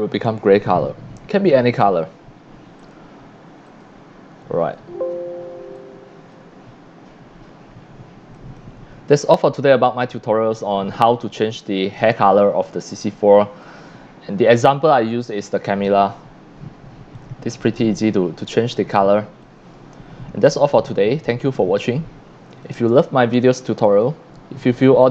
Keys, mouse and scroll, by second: 2.8 click, 3.7 click, 4.6 c, 4.7 click, 5.7-6.3 drag, 8.3 click, 11.8 click, 13.6-14.5 drag, 17.1 click, 19.4-21.6 drag, 22.6 click, 23.5 c, 23.5-25.1 drag.